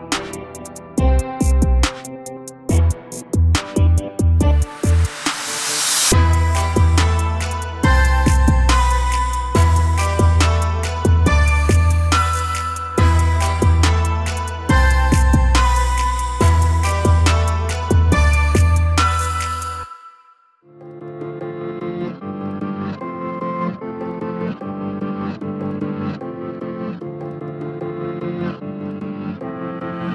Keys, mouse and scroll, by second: 2.6-3.9 drag, 3.9 a, 4.1 a, 4.4 Tab, 4.9 Tab, 5.9 click, 7.6 click, 8.8 click, 9.9-10.4 drag, 11.7-12.7 drag, 12.7 a, 12.9 a, 14.9 click, 16.7 `, 18.3 a, 18.5 a, 18.9-20.5 scroll up 1, 20.5 click, 23.0 click, 28.1 click.